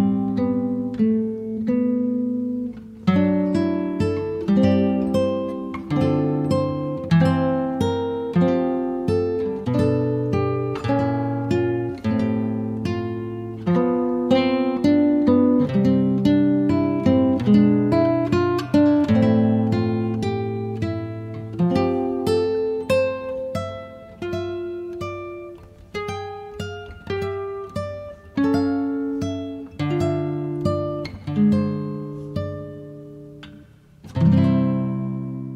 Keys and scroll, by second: 0.4 Return, 10.6 8, 12.5 0, 12.6 Return, 21.2-23.5 typing.